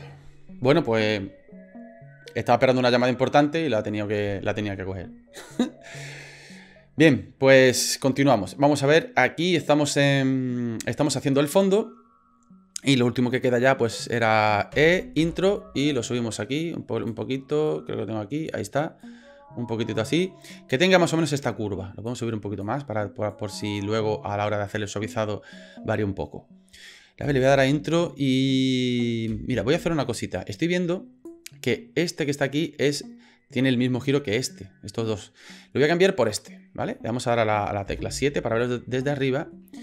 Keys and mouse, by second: 14.8 e, 15.8-17.1 drag, 17.7 click, 19.0-20.3 drag, 22.1 click, 23.3 click, 27.2 space, 30.4 click, 30.4 space, 37.9 KP_7, 39.1 shift+middle click.